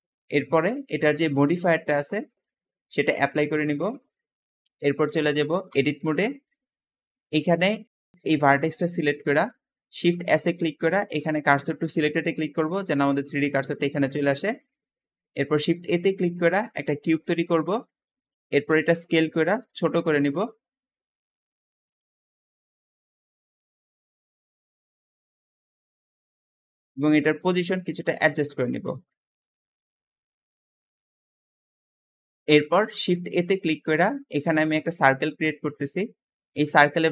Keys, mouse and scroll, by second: 1.0 click, 2.9-5.4 drag, 5.6 Tab, 6.2 shift+middle click, 6.5-7.8 scroll up 4, 6.8 shift+middle click, 7.8 shift+click, 8.0-9.9 shift+middle drag, 9.9 shift+s, 10.6 shift+s, 11.2 shift+s, 12.5 `, 14.1 Escape, 14.1 `, 14.7 scroll down 1, 14.9-15.5 shift+middle drag, 15.5 shift+a, 16.8 click, 17.8-18.6 scroll down 3, 18.6 s, 20.3 middle click, 20.3 scroll down 1, 20.4-20.8 scroll up 1, 20.8 s, 22.0 scroll up 5, 22.2 shift+middle click, 22.3-25.3 typing, 22.6 click, 23.2 click, 25.6 click, 26.2 middle click, 26.7-27.0 scroll up 2, 27.2 click, 28.2-29.1 typing, 29.5 click, 29.8 click, 32.1-33.5 middle drag, 33.5 shift+a, 34.8 click, 36.3-37.1 drag.